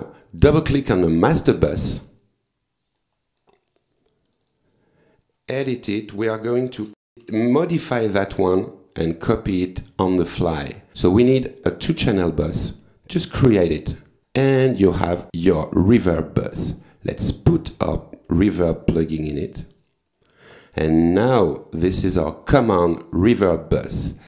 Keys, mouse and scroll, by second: 0.8 click, 3.0 click, 4.3 click, 6.6-8.2 typing, 11.3 click, 13.4 click, 15.2 click, 16.4 click, 16.8 right click, 17.7 click, 19.7 click, 21.1 click, 23.1 click.